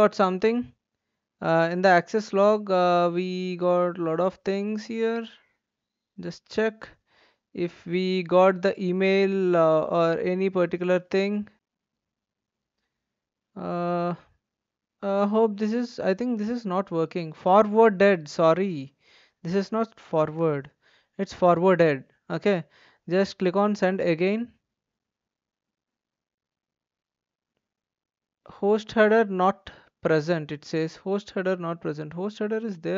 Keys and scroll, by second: 20.3 typing.